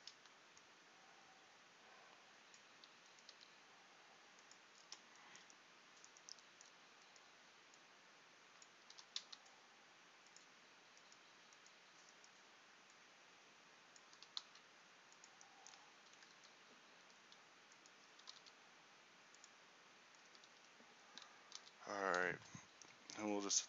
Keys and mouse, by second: 3.2 right click, 3.4 g, 6.9-8.9 drag, 9.1 r, 12.2-14.3 right drag, 14.3-16.3 drag, 14.3 r, 18.3 r, 20.5 a, 20.7 a, 21.7 i.